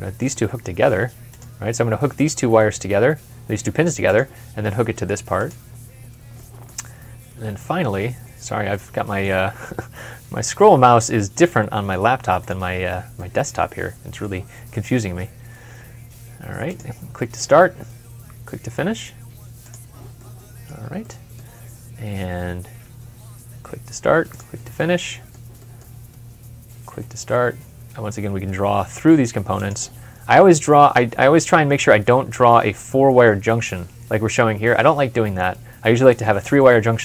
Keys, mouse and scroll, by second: 5.7 w, 5.8-6.2 scroll up 1, 6.2 middle click, 6.6-6.9 scroll down 1, 6.9 scroll up 1, 7.5-7.9 scroll down 1, 8.6 middle click, 10.6 w, 13.0 middle click, 15.5 w, 20.0 w, 20.1 middle click, 22.7 w, 24.6 middle click, 26.9 w, 31.7 scroll up 1, 32.0 scroll down 1, 33.3 scroll up 1.